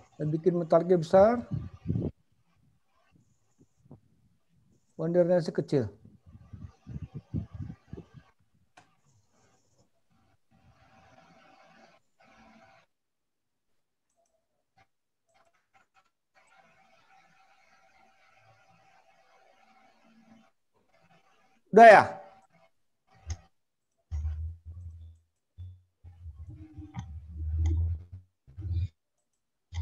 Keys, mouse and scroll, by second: 0.3 click, 5.1 click, 13.1 click, 14.3 click, 16.5 click, 22.0 click.